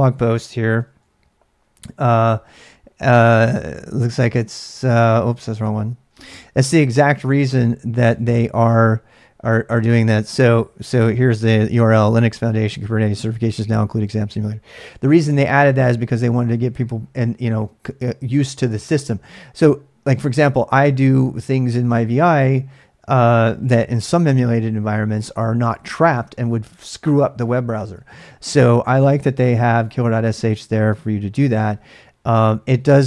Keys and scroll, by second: 0.8 d, 5.6 h, 8.1 typing, 15.6 typing.